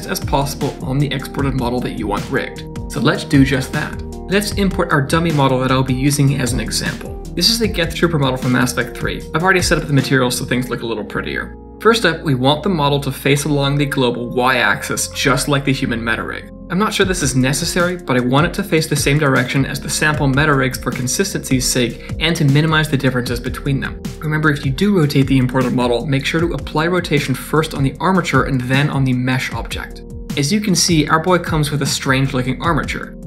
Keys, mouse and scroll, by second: 4.2 click, 6.9 scroll up 1, 7.4 scroll up 2, 7.6 shift+middle click, 7.9 scroll up 2, 8.2 shift+middle click, 9.2 click, 11.3 click, 11.4 z, 12.2 scroll up 3, 12.3 shift+middle click, 12.4 right click, 12.8-14.6 click, 14.6 middle click, 14.7 shift+middle click, 14.8 middle click, 15.1 shift+middle click, 15.1 scroll down 2, 15.9 click, 17.1 r, 19.7 middle click, 20.5 shift+middle click, 21.0 middle click, 21.7 shift+middle click, 22.1 middle click, 22.5 scroll up 1, 22.9 shift+middle click, 24.6 ctrl+a, 26.1 click, 26.7 ctrl+a, 30.3 middle click, 30.3-30.9 scroll up 2.